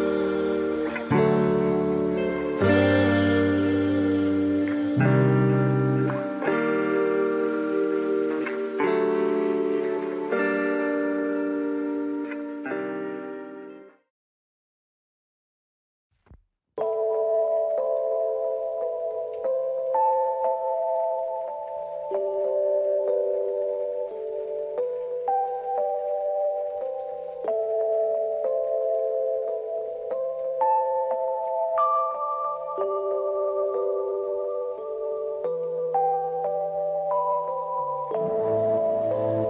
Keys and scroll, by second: 20.1 ctrl+=, 20.8 space, 24.7 ctrl+-, 25.9 space.